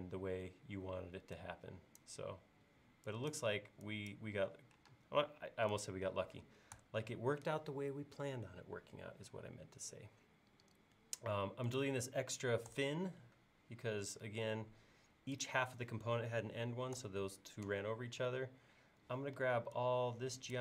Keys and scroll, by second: 5.0 space, 6.8 BackSpace, 12.8 BackSpace, 17.0 BackSpace, 19.4 e.